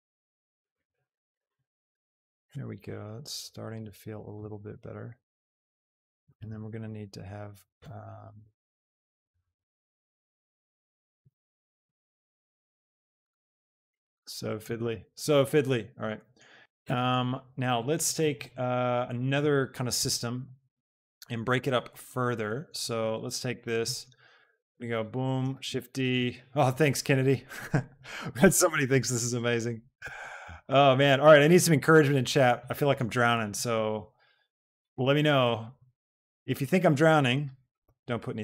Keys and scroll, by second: 24.9 b, 25.7 shift+d, 37.8 KP_0, 38.1 Return.